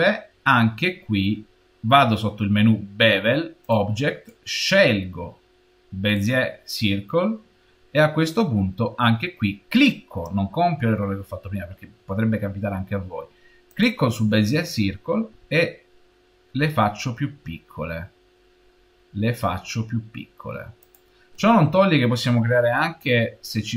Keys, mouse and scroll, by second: 3.5 click, 4.4 click, 13.6 click, 15.3 s.